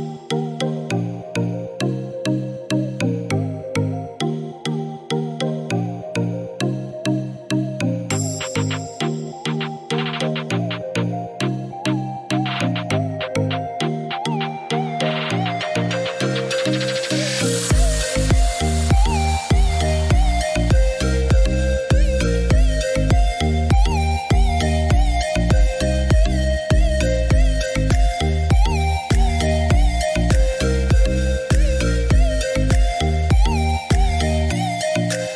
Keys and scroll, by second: 22.9 8, 23.2 Return.